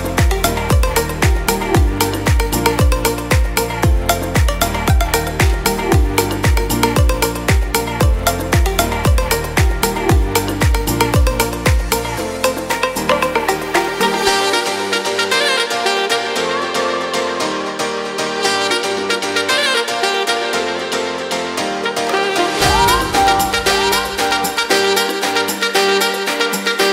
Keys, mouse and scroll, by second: 2.0 alt+w, 3.5 alt+w, 18.9-22.1 drag, 22.5 middle click, 23.2 click, 24.7 alt+w, 25.4 alt+w.